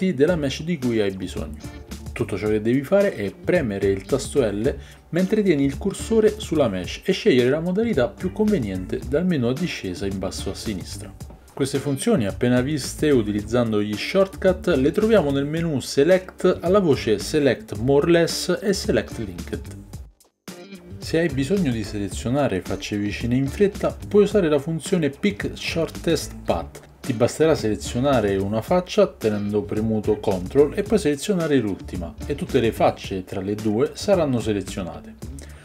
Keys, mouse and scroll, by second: 0.6 l, 2.9 click, 4.9 l, 6.9-8.0 drag, 8.1 l, 9.1 l, 10.1 l, 11.7-21.7 drag, 21.7-25.2 middle drag, 25.2 click, 25.4-29.7 middle drag, 29.7-30.9 drag, 30.9 ctrl+middle click, 31.7-32.7 ctrl+drag.